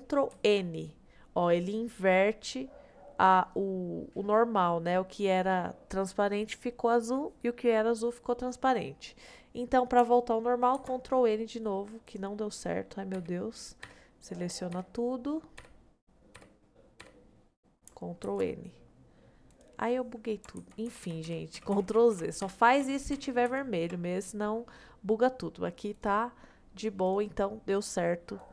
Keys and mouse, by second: 0.3 shift+n, 0.9-3.5 middle drag, 4.5 middle click, 7.2 middle click, 8.5 middle click, 10.7 shift+n, 12.1 click, 13.1 l, 14.8 l, 15.6 l, 16.4 l, 17.0 l, 18.3 shift+n, 18.9 middle click, 20.6 ctrl+z, 20.9 ctrl+z, 21.1 ctrl+z, 21.3 ctrl+z, 21.6 ctrl+z, 21.8 ctrl+z, 21.9 ctrl+z, 22.2 ctrl+z, 22.5 ctrl+z, 22.8 ctrl+z, 23.2 ctrl+z, 23.5 ctrl+z, 24.1 middle click, 26.0-27.4 drag.